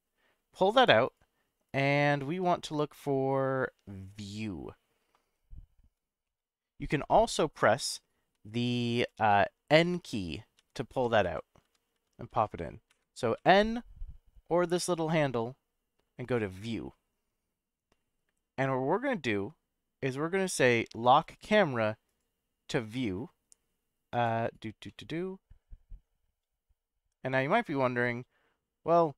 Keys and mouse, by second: 1.1 click, 1.6 click, 6.2-7.0 shift+middle drag, 8.3-13.4 typing, 14.7 click, 16.3 click, 21.2 click, 22.0 click, 24.1-24.9 drag, 24.9-29.1 middle drag.